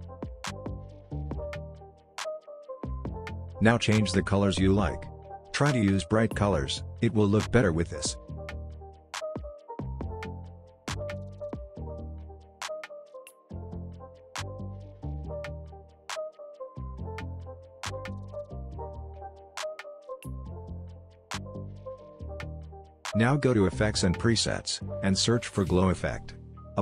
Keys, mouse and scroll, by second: 0.7-2.6 scroll up 1, 3.5-5.3 drag, 8.1-10.6 drag, 15.4-16.9 scroll down 1, 16.9-17.5 drag, 19.3-20.5 scroll up 1, 21.5 click, 23.9 click, 24.6-25.9 typing.